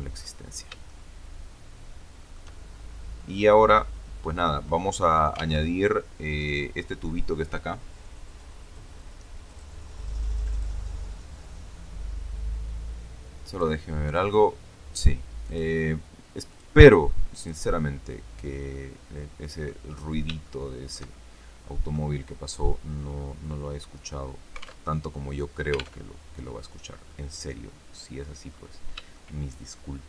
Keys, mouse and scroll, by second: 0.1-0.5 scroll up 2, 0.8-2.4 shift+middle drag, 3.2-4.7 middle drag, 5.5 alt+Tab, 9.4 click, 10.4 click, 13.4 click, 15.4 click, 16.4 click, 17.3 click, 18.3 scroll down 1, 18.6-19.8 middle drag, 19.9-20.2 scroll up 1, 20.3-22.0 shift+middle drag, 22.1-22.9 scroll down 2, 22.9-23.8 scroll up 4, 23.8-24.3 scroll down 2, 24.7 alt+Tab, 25.9 alt+Tab, 27.0-28.3 drag, 29.1-30.0 shift+middle drag.